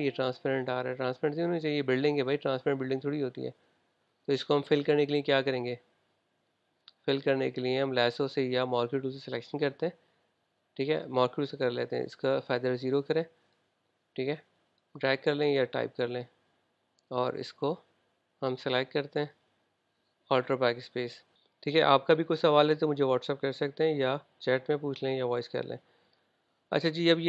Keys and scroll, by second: 21.0 alt+BackSpace.